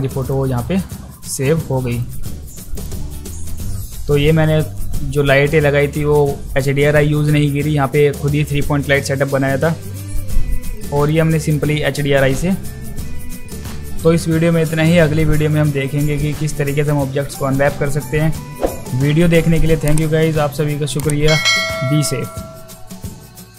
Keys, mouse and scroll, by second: 0.2 click, 2.0 click, 2.7 click, 10.7 click, 11.0 click, 11.4 click.